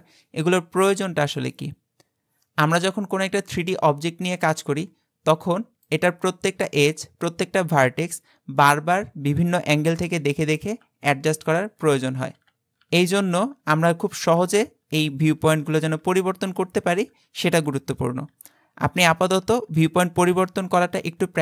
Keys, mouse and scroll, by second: 3.7-4.6 middle drag, 4.6 Tab, 4.9-5.5 scroll up 2, 5.9 click, 6.7 Tab, 9.8-14.9 typing, 16.1-18.3 typing.